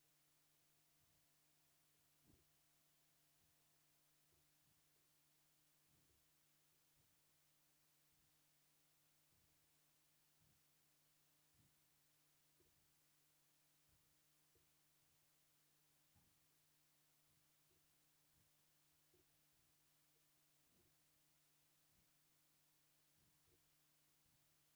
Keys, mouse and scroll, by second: 0.4 click, 0.7-1.5 scroll up 6, 0.8 shift+middle click, 1.5 click, 2.0 middle click, 2.3 g, 3.0 middle click, 3.2 click, 3.6 middle click, 4.3 g, 5.0 middle click, 5.4 click, 6.1 g, 6.7 scroll down 3, 6.8 shift+middle click, 7.2 scroll up 2, 7.3 shift+middle click, 7.8 click, 7.9 middle click, 8.5 middle click, 9.1 shift+click, 9.3 scroll down 2, 9.5 ctrl+z, 9.5 middle click, 10.4-10.8 scroll up 3, 10.8 middle click, 11.2 scroll down 1, 11.3 middle click, 12.2 shift+click, 12.6 g, 13.2 middle click, 13.7 click, 14.2 middle click, 14.6 g, 15.2 scroll down 3, 15.3 shift+middle click, 16.4-17.1 scroll up 2, 16.5 shift+middle click, 17.1 click, 17.7 g, 18.2 middle click, 18.5 click, 18.7 shift+click, 19.1 g, 19.7 shift+middle click, 20.3 click, 20.8 g, 21.6 middle click, 22.1 click, 22.4 click, 23.1 shift+click, 23.5 g, 24.1 shift+middle click.